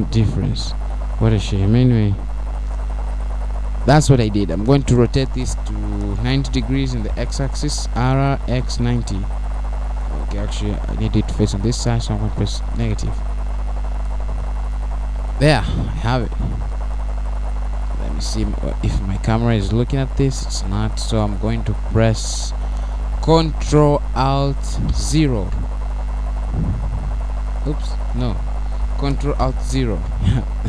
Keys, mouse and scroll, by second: 0.3 click, 1.6-2.0 scroll up 2, 2.5 scroll up 1, 2.8 middle click, 4.2-4.5 scroll down 2, 5.8 click, 6.7 scroll down 1, 6.9 middle click, 10.3 r, 18.2 click, 19.0 middle click, 20.4-21.4 scroll down 4, 22.0 KP_0, 23.3 KP_0, 24.5 scroll down 1, 24.8 middle click, 28.5 ctrl+alt+Right.